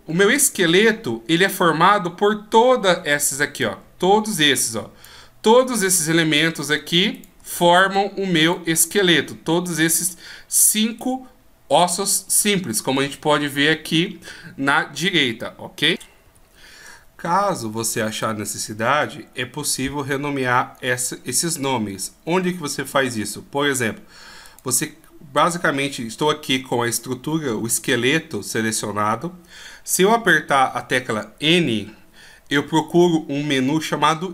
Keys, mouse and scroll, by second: 3.2 b, 6.3 shift+right click, 7.0 shift+right click, 8.3 shift+right click, 24.4 right click, 30.6 n, 31.3-32.0 scroll up 3, 32.1-33.8 scroll up 7.